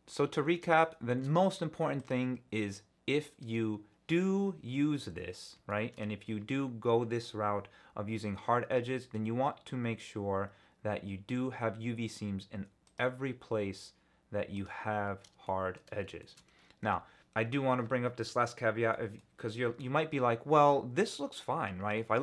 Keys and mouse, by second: 0.0 click, 0.4 Tab, 0.9 shift+click, 1.4 Tab, 2.0 click, 5.0 Tab, 5.7 shift+click, 5.8 shift+middle click, 12.8-14.7 drag, 15.4 shift+middle click, 16.2 shift+middle click, 16.8 Tab, 17.4 Tab, 18.9 click.